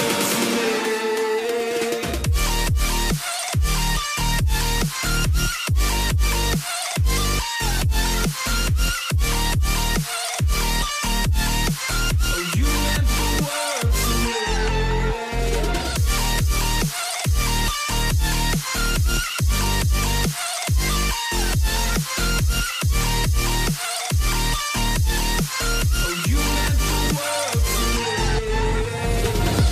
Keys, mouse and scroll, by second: 1.0 v, 3.6 right click.